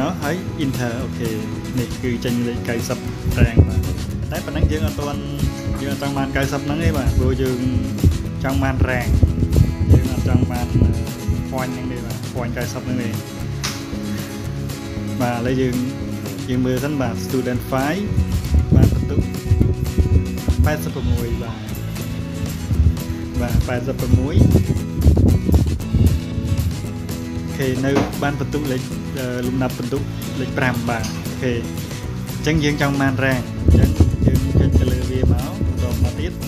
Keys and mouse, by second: 2.4 click, 5.9 ctrl+click, 7.8 ctrl+click, 8.9 ctrl+click, 11.6 click, 12.2 click, 12.8 click, 15.7 click, 18.5 ctrl+click, 20.7 ctrl+click, 22.9 ctrl+click, 29.1 ctrl+click, 30.2 click, 30.9 ctrl+click, 33.7 click, 34.4 click.